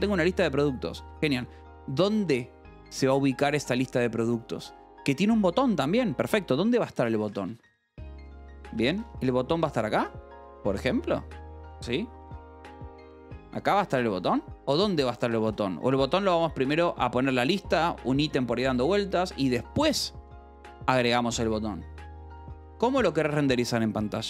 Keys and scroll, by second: 0.4 shift+v, 0.9 Escape, 5.2 o, 6.3-11.0 typing, 12.1-14.4 typing, 14.7 Escape, 15.9 d, 16.6 Escape, 17.2 k, 17.6 j, 18.4 o, 19.7 Escape, 20.7 p, 21.1 Escape, 22.2-23.2 typing, 23.9 ctrl+s.